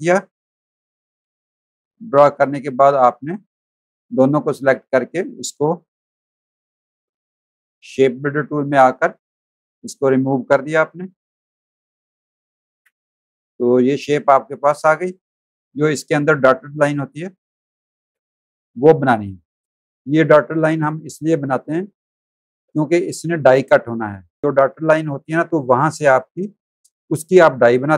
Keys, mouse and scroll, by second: 2.4 v, 2.7 click, 4.2 click, 7.1 click, 9.3 click, 10.7 v, 11.0 click, 11.3 click, 11.8 click, 12.7 Delete, 13.2 click, 13.8 space, 13.8 click, 15.0 space, 15.1 click, 17.0 click, 17.6 space, 17.8 click, 19.4 click.